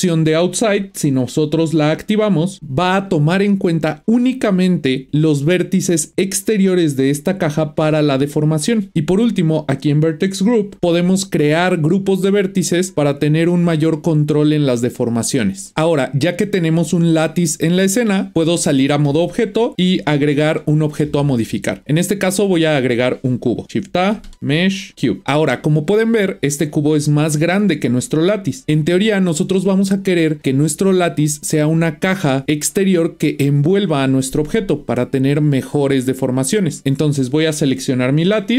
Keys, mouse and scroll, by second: 1.8 click, 6.4-8.9 middle drag, 18.3 Tab, 19.1 Tab, 26.5-27.0 scroll down 1, 27.0-28.9 middle drag, 36.8 click, 37.9 click.